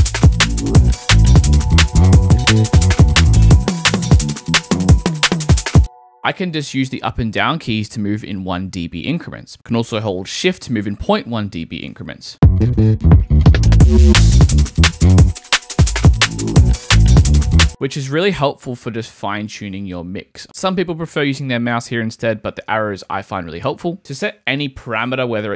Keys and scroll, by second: 0.2 Up, 12.3 space, 14.7 shift+Up.